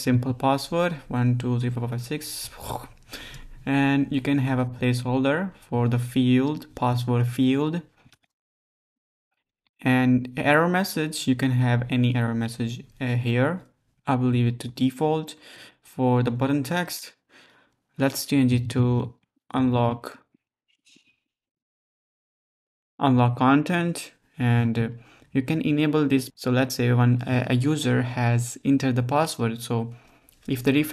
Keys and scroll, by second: 0.0-0.9 typing, 7.9-9.8 typing, 18.7-23.0 typing.